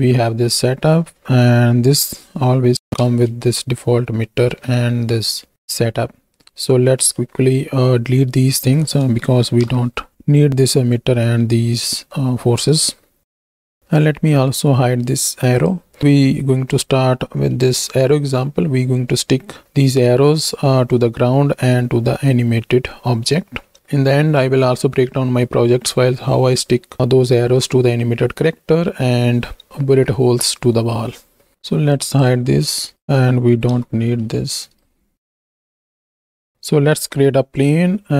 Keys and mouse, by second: 0.4 click, 0.4 middle click, 2.8 shift+Right, 2.8 shift+Left, 3.1 space, 4.5 space, 7.3 middle click, 9.5 shift+Right, 9.8 shift+Left, 13.4 x, 13.7 x, 15.5 click, 17.5 middle click, 31.5-32.2 drag, 32.9 right click, 33.8 x, 34.2 middle click, 34.7 right click, 34.9 ctrl+click, 35.2 x, 35.6 click, 36.1 click, 37.0 shift+a.